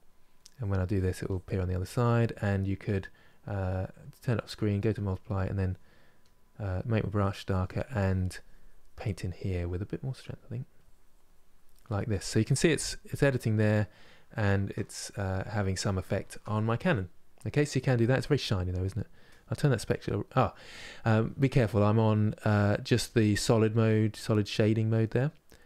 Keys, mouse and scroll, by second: 0.2-1.4 drag, 1.4-4.5 middle drag, 4.5 click, 5.0 middle click, 5.9-7.4 drag, 7.4 middle click, 7.8-12.8 drag, 12.8-19.0 middle drag, 19.0-25.6 drag.